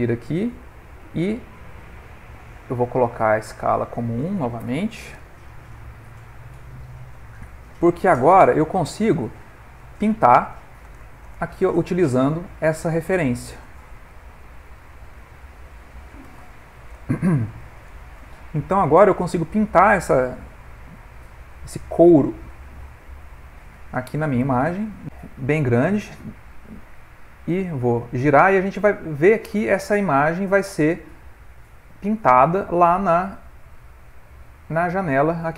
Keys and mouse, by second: 0.0 ctrl+middle click, 3.1 click, 8.6 shift+right click, 9.8 click, 14.5 ctrl+middle click, 15.4 middle click, 16.3 click, 19.6 middle click, 19.9 ctrl+middle click, 20.5 middle click, 21.1 ctrl+middle click, 23.1 shift+right click, 24.7 f, 25.0 click, 26.3 click, 27.2 middle click, 28.6 click, 31.5 middle click, 31.7 middle click, 32.5 click.